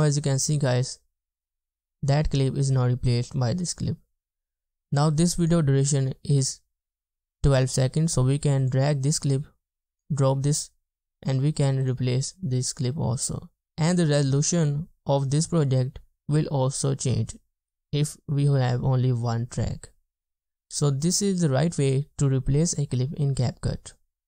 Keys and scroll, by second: 0.0 space, 1.9 space, 13.1 space, 13.7 space.